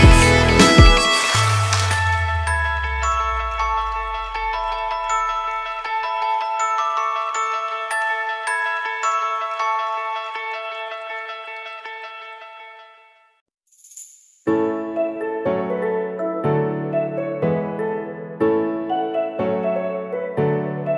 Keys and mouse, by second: 0.1 click, 1.8 Tab, 2.1 w, 3.2 middle drag, 4.1-4.5 middle drag, 6.2 Tab, 6.7 a, 7.1 s, 10.1 Tab, 10.2 click, 11.7 click, 12.5 middle drag, 13.4 shift+a, 16.9-18.3 middle drag, 18.6 shift+middle drag, 19.0 middle click.